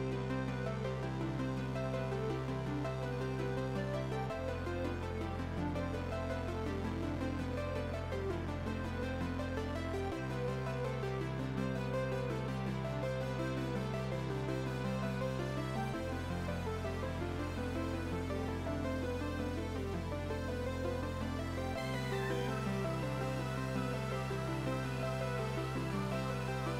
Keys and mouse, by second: 1.5 click, 1.9 click, 2.5 click, 6.1 v, 6.9 v, 7.6 alt+y, 7.7 click, 8.3 right click, 8.5 click, 11.9 right click, 12.2 click, 14.1 c, 14.6 KP_6, 14.7 Return, 14.8 click, 15.3 Escape, 16.7 click, 18.0 KP_1, 18.1 Return, 18.3 a, 18.4 click, 19.4 Escape, 19.9 click, 22.4 click, 22.8 KP_2, 23.1 KP_4, 23.2 Return, 23.4 a, 23.5 Escape, 23.7 click, 25.0 click, 26.4 right click, 26.6 click.